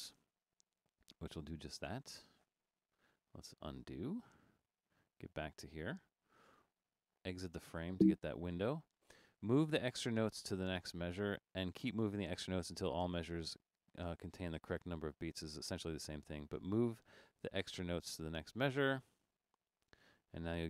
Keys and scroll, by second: 3.1 super+z, 3.9 super+z, 7.6 Right.